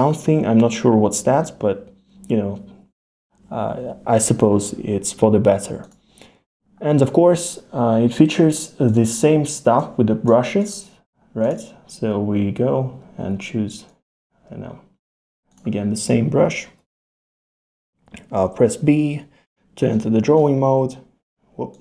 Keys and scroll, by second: 16.8 b, 18.9 b.